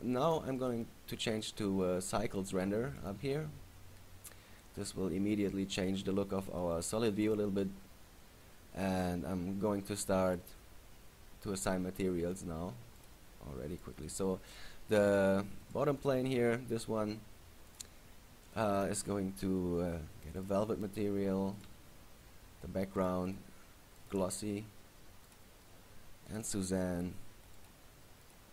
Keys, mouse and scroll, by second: 0.4 click, 0.8 click, 1.5 click, 4.0-5.0 scroll down 5, 4.5 middle click, 6.3-6.7 scroll up 5, 6.8 middle click, 9.3-10.5 scroll down 3, 10.5 right click, 11.3 scroll down 2, 13.1 click, 13.9 right click, 14.7 right click, 15.8 right click, 16.2 right click, 17.8 click, 18.6 click, 21.7 right click, 23.1 click, 23.5 click, 24.8 click, 26.4 right click, 27.7 click, 28.4 click.